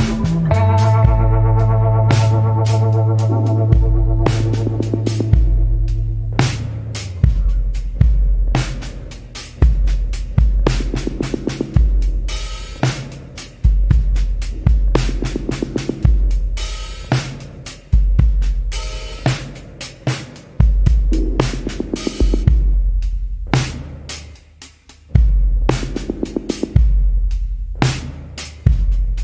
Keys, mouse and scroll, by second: 25.3 scroll down 1.